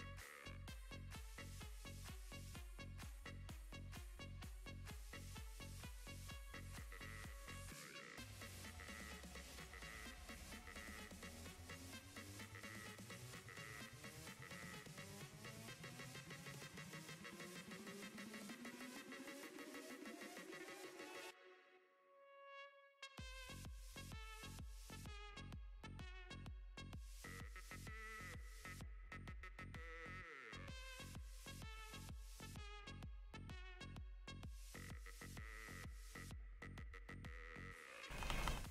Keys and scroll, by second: 1.1 s, 22.6 s, 38.2 ctrl+z.